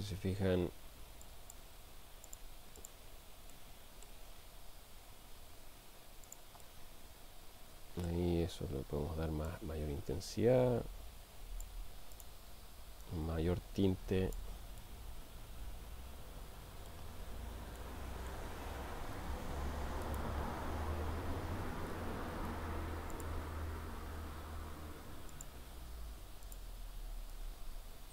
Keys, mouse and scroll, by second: 1.3-1.8 drag, 2.3 click, 2.8 click, 3.8 middle click, 4.9 r, 6.3 click, 6.7-8.3 middle drag, 9.5-11.7 drag, 12.2 click, 14.8-17.3 middle drag, 17.8-18.4 middle drag, 20.0 click, 22.4 shift+d, 23.9 r.